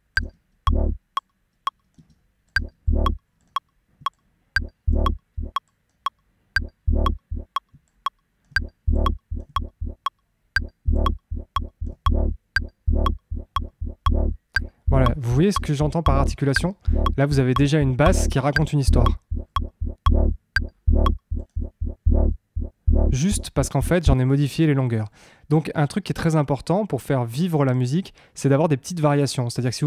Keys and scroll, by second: 0.1 space, 1.9 space, 17.1 Tab, 18.9 Tab, 24.1 space.